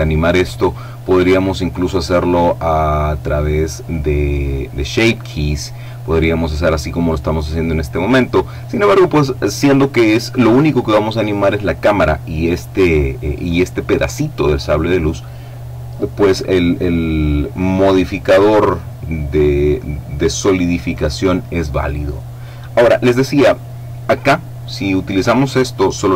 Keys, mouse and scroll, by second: 24.8-26.1 drag.